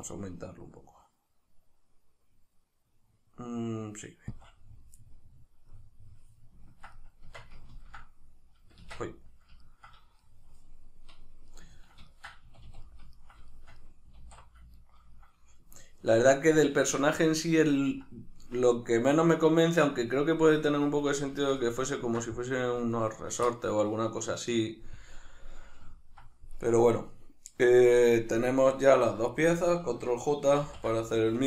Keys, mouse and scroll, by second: 4.4 click, 5.0-26.6 middle drag, 7.3 Tab, 8.8 Tab, 12.4 a, 14.2 alt+q, 26.6 right click, 29.3 shift+right click, 30.6 ctrl+j.